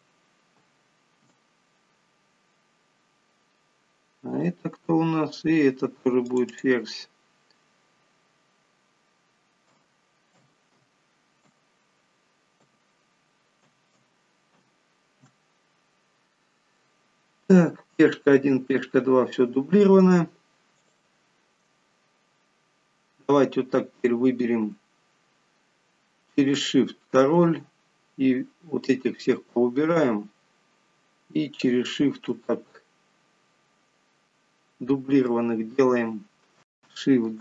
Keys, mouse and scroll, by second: 4.7 click, 6.7 click, 6.9 click, 14.3 0, 21.2 shift+click, 23.0-23.7 scroll down 2, 23.7-24.3 scroll up 2, 24.4-25.1 scroll down 1, 27.0 shift+click, 28.2-29.8 scroll down 2, 29.8-30.6 scroll down 4, 31.3-31.7 scroll down 2, 32.1 shift+click.